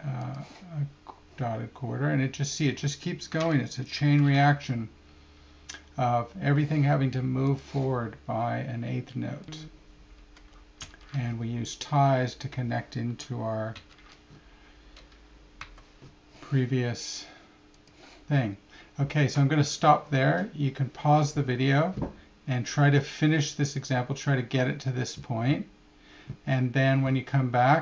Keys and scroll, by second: 14.1 5.